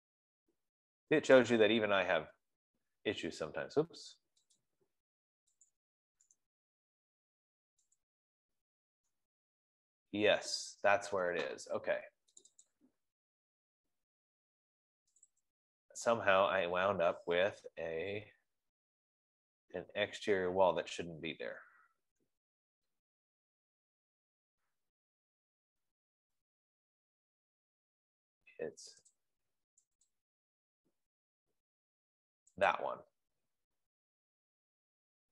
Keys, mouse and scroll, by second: 2.0 click, 5.0 click, 6.2 click, 8.5 right click, 12.8 click, 13.4 click, 15.7 click, 15.9 click, 18.4 scroll, 19.1 scroll, 22.1-23.9 scroll, 23.9 middle click, 24.1 middle click, 24.5 middle click, 24.8 middle click, 25.3 middle click, 25.4 middle click, 26.6-28.5 middle click, 27.9 middle click, 29.0 scroll, 29.6 click, 30.6 click, 33.2 click.